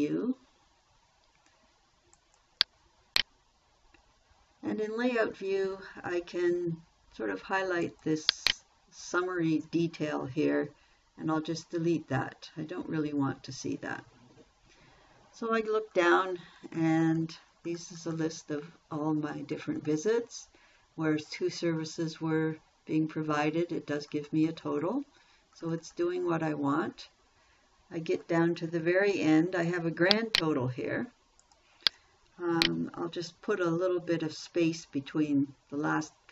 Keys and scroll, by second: 12.3 Delete.